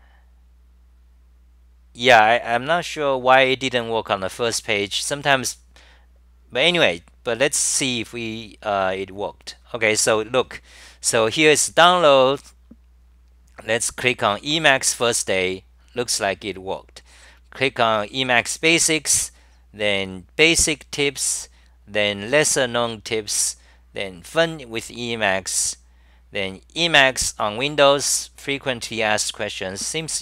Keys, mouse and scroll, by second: 1.1-2.9 typing, 13.1-13.8 typing, 19.2-20.0 typing, 24.9-25.7 typing.